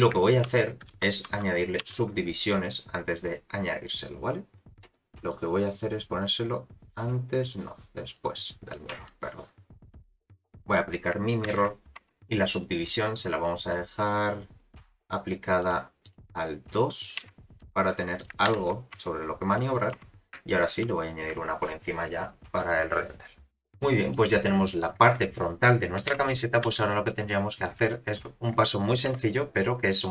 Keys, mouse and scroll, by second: 0.4 ctrl+1, 0.9 ctrl+2, 1.3 ctrl+3, 1.8 ctrl+4, 5.3 click, 7.5 click, 8.7-9.1 middle drag, 10.0 click, 10.5 click, 11.5 ctrl+a, 12.0 Tab, 12.5 middle click, 15.6 click, 16.0 click, 17.2 Tab, 18.2 click, 18.5 ctrl+a, 19.0 Tab, 19.5 middle click, 19.9 Tab, 20.7 ctrl+1, 23.3 scroll down 1, 23.5 middle click, 24.1 middle click, 26.1 Tab, 26.6 a, 27.1 middle click, 27.9 shift+middle click, 29.1 KP_Decimal, 30.0 middle click.